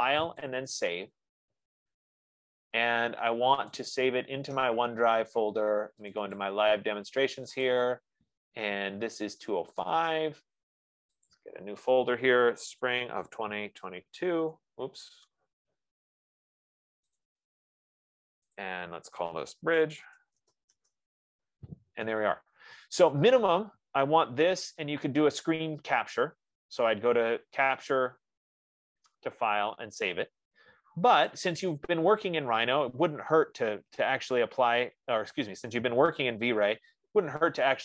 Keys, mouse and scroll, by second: 1.0 click, 4.4 click, 6.5 click, 6.7 click, 8.0 click, 8.4 click, 10.4 click, 10.6 click, 12.0 click, 12.9-15.6 typing, 15.5 Return, 17.6 click, 17.8 click, 18.9 click, 19.8-22.0 typing, 25.6-26.3 typing, 25.8 click, 31.8 click, 34.6 middle click.